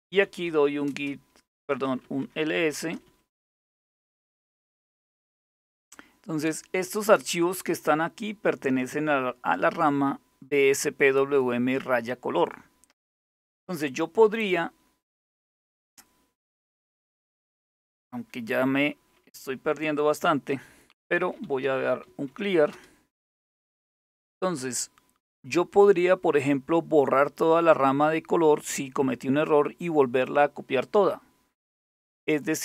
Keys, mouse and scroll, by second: 0.0-4.9 typing, 8.1 click, 12.0 click, 20.5-22.4 typing, 31.9 click.